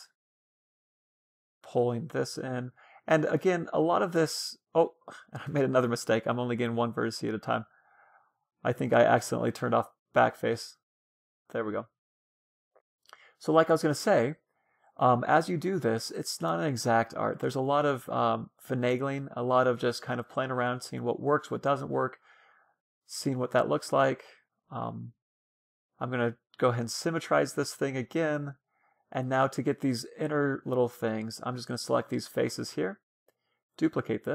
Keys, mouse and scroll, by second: 0.2 middle click, 1.1 a, 1.5 c, 1.7 click, 2.2 right click, 3.8 ctrl+z, 4.1 click, 4.8-6.7 middle drag, 5.8 ctrl+z, 10.3-12.2 drag, 10.9 a, 11.1 c, 13.0-14.9 drag, 14.2 a, 14.4 c, 15.5-17.4 drag, 17.0 a, 17.4 c, 19.1 right click, 19.9 middle click, 20.9-22.0 drag, 21.0 a, 21.6-24.3 middle drag, 22.3 a, 23.6 a, 24.6 l, 25.5 w, 27.5-30.6 middle drag, 30.7-32.6 drag, 31.0-33.1 middle drag, 32.1-34.3 right drag.